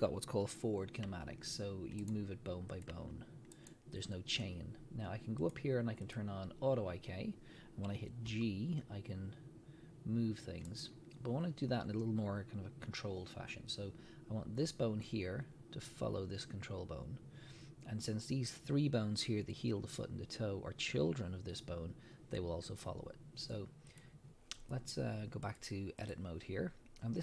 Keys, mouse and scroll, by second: 1.1 r, 2.1 right click, 2.7 click, 2.9 r, 3.7 right click, 5.4-10.8 drag, 8.3 g, 10.8 right click, 23.9 click, 25.4-27.2 drag.